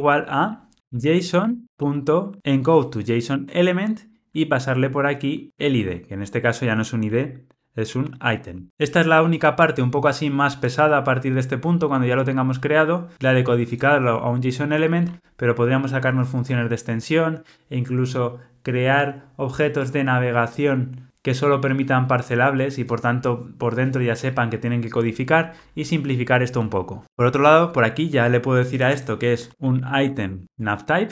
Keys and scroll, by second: 3.3 Return, 5.8 Escape, 7.9 shift+F6, 30.5 Tab.